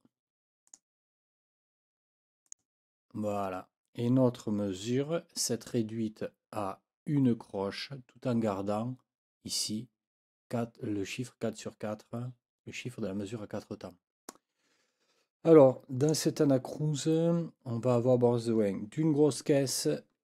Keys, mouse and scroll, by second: 0.7 click, 2.5 click, 16.0 click.